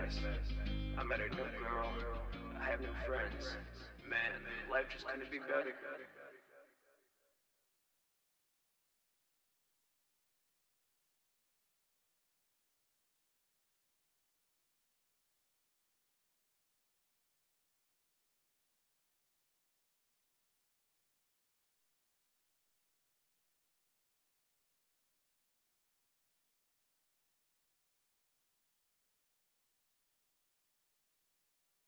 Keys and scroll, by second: 16.0 super+`, 23.6 super+`, 26.1 shift+r, 28.4 ctrl+shift+-, 30.7 s.